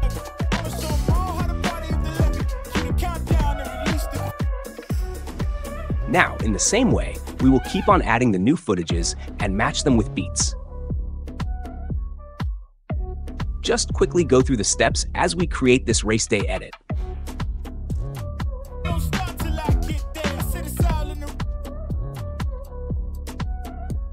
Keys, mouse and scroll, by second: 4.3 space, 6.3 click, 8.8-9.9 drag, 13.4 click, 13.8 click, 13.9 space, 14.6 space, 15.2 click, 15.2 space, 15.4 space, 15.7 click, 16.4 click, 16.7 click, 17.6 drag, 18.1 click, 18.7 space, 21.3 space, 21.8 click, 21.9 Delete, 22.3 click, 22.9 click, 23.0 space, 23.5 space, 23.9 click.